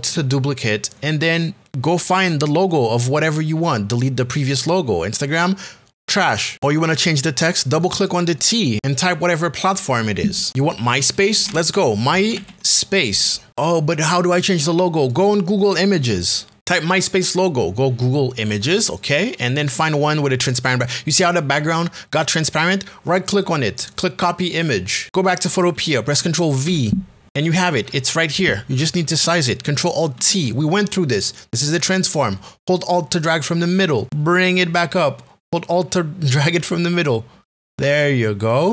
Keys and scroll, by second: 11.3-13.0 typing, 16.6 Return, 26.9 ctrl+v, 32.3 alt+t.